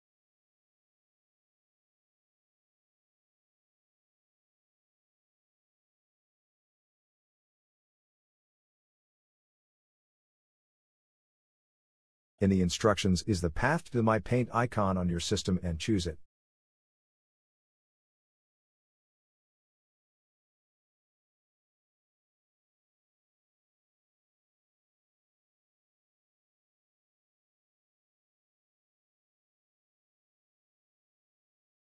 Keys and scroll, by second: 18.7-21.4 typing.